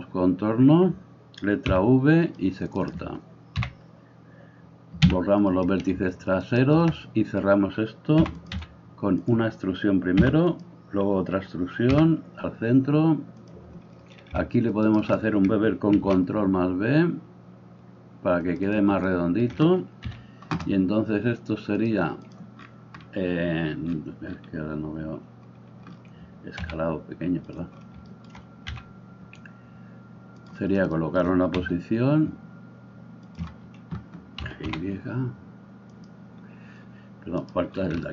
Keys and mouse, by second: 1.8 v, 2.4 middle click, 2.8 right click, 3.6-6.4 middle drag, 3.6 l, 5.1 x, 6.4 alt+right click, 6.6-14.9 alt+middle drag, 8.2 e, 8.5 s, 10.3 e, 12.0 m, 14.9 alt+right click, 15.4-18.7 ctrl+middle drag, 15.9 ctrl+b, 18.7 click, 19.1-21.8 middle drag, 20.0 KP_3, 21.8-27.5 drag, 26.6 s, 27.5-38.1 middle drag, 28.8 g, 31.5 s, 34.4 g.